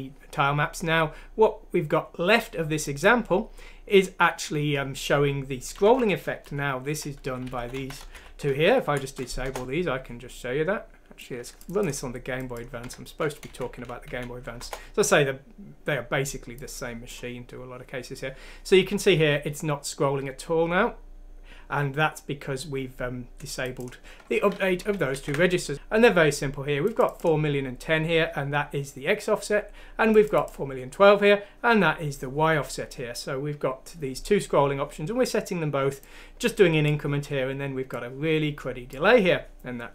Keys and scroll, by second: 6.4 Home, 6.9 Up, 7.2 Down, 7.4 ;, 7.5 Up, 7.7 Up, 8.0 Home, 8.1 ;, 9.0 F6, 9.4 Return, 12.8 F6, 13.5 Down, 13.8 Up, 14.1 Up, 14.6 Return, 24.7 ctrl+z, 25.1 ctrl+z.